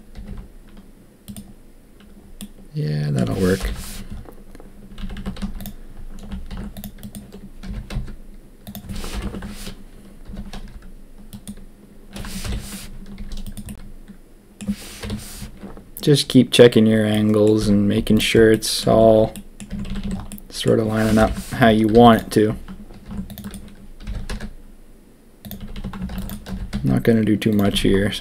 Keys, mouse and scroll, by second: 1.5 g, 2.4 middle click, 3.6 ctrl+KP_1, 5.0 a, 5.1 a, 5.4 z, 6.5 ctrl+r, 7.6 g, 9.1 ctrl+KP_3, 10.2 g, 12.4 ctrl+KP_1, 13.1 s, 13.6 middle click, 15.0 KP_7, 17.1 middle click, 17.5 z, 18.5 click, 18.9 Tab, 19.3 drag, 19.6 Tab, 19.8 a, 20.0 a, 20.2 click, 21.1 ctrl+KP_1, 21.9 z, 23.1 ctrl+r, 24.0 g, 25.6 a, 25.7 a, 26.1 ctrl+r, 26.4 g, 27.6 a, 27.7 a, 28.1 click.